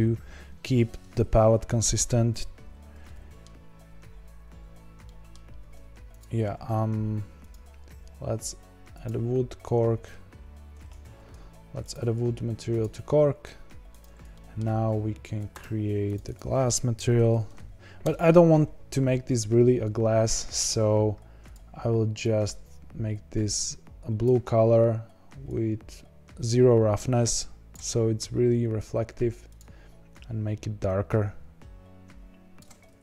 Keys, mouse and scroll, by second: 3.4-3.9 scroll down 1, 3.9-4.5 scroll up 5, 4.6-5.0 scroll down 1, 5.0-6.1 shift+middle drag, 6.1 click, 9.0-11.0 drag, 11.0 ctrl+z, 12.8-14.0 drag, 14.3-15.5 shift+middle drag, 15.5 drag, 16.0 click, 16.2 click, 18.0 s, 22.2 click, 25.8-30.1 drag, 32.8-33.0 scroll down 5.